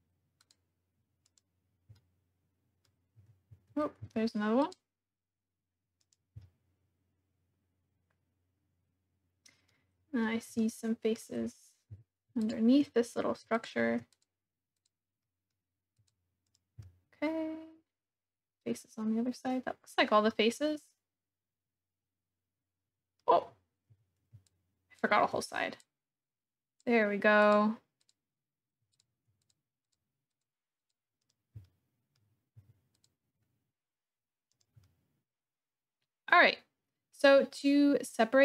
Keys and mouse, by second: 1.3 click, 2.0 middle click, 4.0 c, 6.0 click, 6.4 click, 7.1-9.7 middle drag, 10.6 shift+middle click, 11.8 c, 13.6 shift+click, 14.2 click, 14.7 click, 15.3 middle click, 16.0 click, 16.4 click, 16.8-18.0 middle drag, 18.0 click, 18.6-19.9 middle drag, 20.3-23.2 middle drag, 23.9 c, 27.4 click, 28.1 click, 29.0 shift+click, 29.4 click, 29.9 click, 30.3 click, 30.8 click, 31.3 click, 31.6 click, 32.6 c, 34.5-35.6 drag, 35.6-38.4 middle drag.